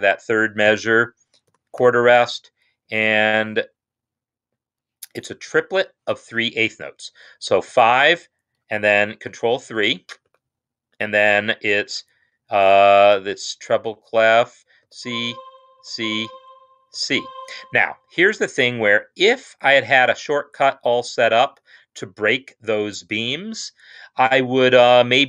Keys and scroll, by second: 0.6-1.9 typing, 7.7 5, 10.2 ctrl+3, 14.7-15.7 typing, 16.7 typing.